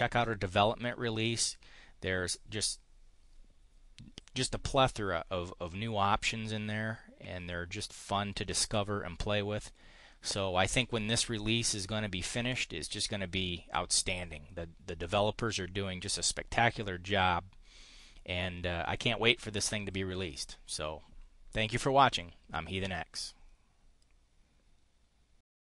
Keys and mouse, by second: 0.0 click, 1.2 click, 25.6 click.